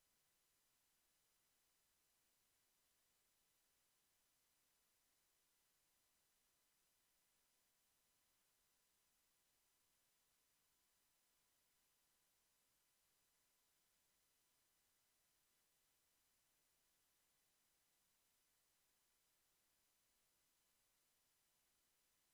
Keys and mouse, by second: 0.9 g, 3.0 Tab, 4.1 ctrl+s, 6.6 Tab, 10.8 ctrl+t, 11.9 a, 21.2 Tab.